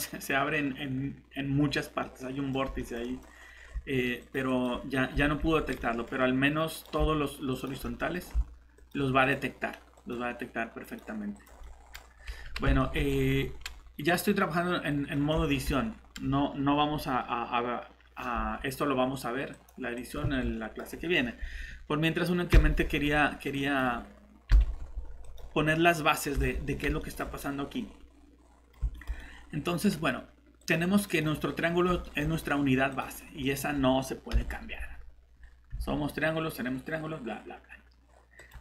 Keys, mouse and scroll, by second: 1.6 scroll down 1, 2.0 middle click, 3.3 scroll up 1, 4.2 click, 5.5 scroll down 1, 5.8 middle click, 6.7 click, 8.0 middle click, 8.8 click, 11.6 middle click, 12.1 scroll down 1, 12.3 alt+Tab, 12.8 middle click, 15.7 scroll up 1, 19.5 click, 20.2 shift+Escape, 20.5 middle click, 22.5 Delete, 23.5 click, 25.6 middle click, 26.3 Tab, 27.2 middle click, 30.6 click, 31.4 middle click, 32.9 click, 35.3-35.7 scroll down 1, 38.4 click.